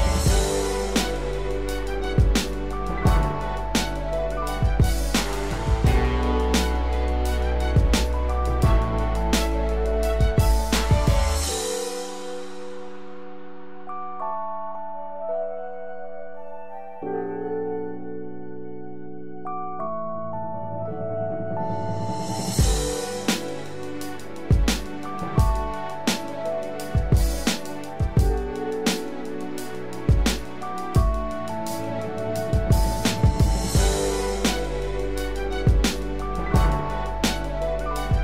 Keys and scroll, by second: 5.9 ctrl+z, 8.9 ctrl+Return, 11.1 ctrl+d, 14.3 ctrl+0, 15.3 ctrl+=, 31.7 ctrl+0.